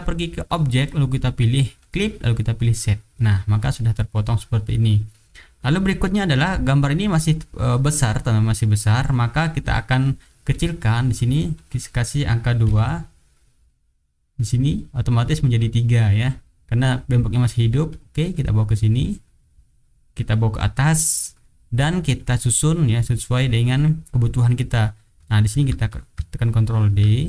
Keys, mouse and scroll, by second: 0.6 click, 1.8 click, 2.7 click, 3.6 click, 3.9 middle click, 4.4 click, 6.0 click, 6.5-9.3 drag, 10.5 click, 10.8 click, 11.5 click, 12.6 KP_2, 14.5 click, 17.4 click, 17.9 click, 18.4-19.8 drag, 20.6 click, 21.0 middle click, 21.7 click, 22.2 click, 22.5-23.5 drag, 24.6 click, 25.5 ctrl+d, 25.9-27.2 ctrl+drag.